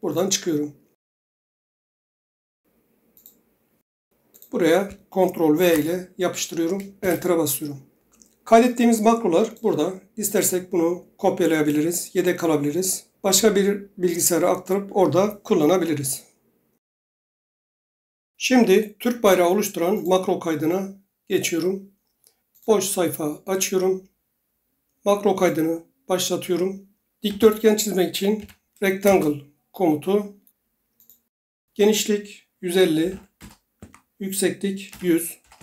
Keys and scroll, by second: 2.6 alt+Tab, 5.5 ctrl+v, 6.9 Return, 27.0-28.3 typing, 29.0 Return, 32.7-33.5 typing, 33.8 Tab, 34.9-35.5 typing.